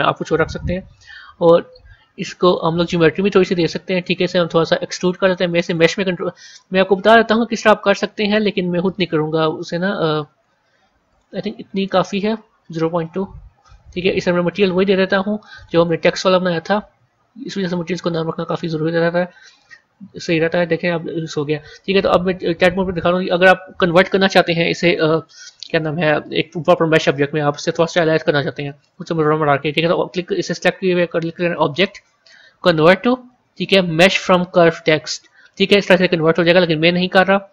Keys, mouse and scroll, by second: 0.5 Tab, 2.3 click, 2.9-3.3 scroll down 1, 4.8-6.5 drag, 6.5-9.5 middle drag, 9.9-12.9 drag, 12.9-14.4 middle drag, 14.4 click, 15.3-18.5 drag, 21.0-22.3 scroll up 1, 22.3 Tab, 23.1 Tab, 31.4-34.5 drag.